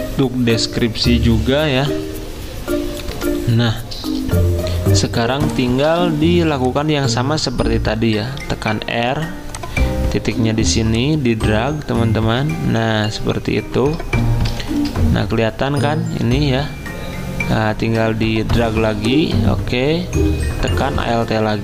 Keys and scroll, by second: 3.1 F10, 5.2 v, 8.4 r, 14.6 x.